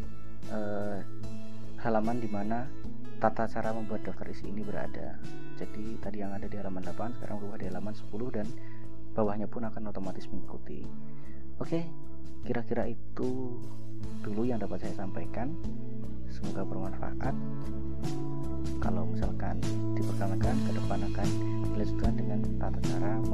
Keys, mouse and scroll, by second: 23.1 scroll up 2.